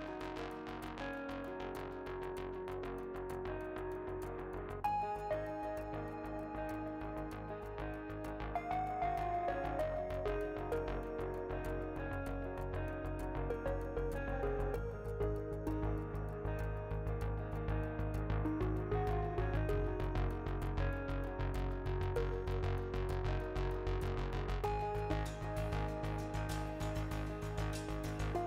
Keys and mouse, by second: 0.6 right click, 0.9-2.3 middle drag, 2.3 ctrl+z, 2.4 ctrl+z, 3.2-6.6 middle drag, 6.1 KP_7, 7.1-8.4 drag, 7.7 shift+a, 12.2 KP_7, 17.4-18.6 drag, 22.2-23.5 drag, 24.7-26.0 drag, 26.2-27.2 drag, 27.2 middle click.